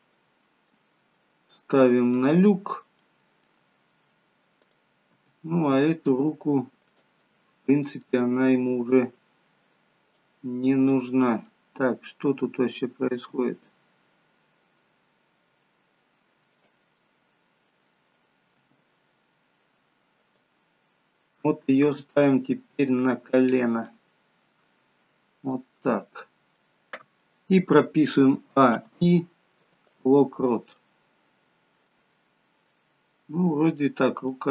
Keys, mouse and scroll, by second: 1.2 middle click, 4.6 middle click, 4.6 click, 5.1 g, 7.3 middle click, 8.6 middle click, 10.1 click, 10.5-11.7 scroll down 3, 10.9 middle click, 11.7 scroll up 1, 12.0-12.5 scroll down 1, 12.5-13.0 scroll up 1, 13.0 g, 16.8 middle click, 18.7 r, 21.0 middle click, 21.9 r, 23.8 middle click, 25.8-26.6 scroll down 1, 26.6 middle click, 26.6 scroll down 1, 28.4 a, 28.7 i, 30.8 middle click, 32.8 middle click.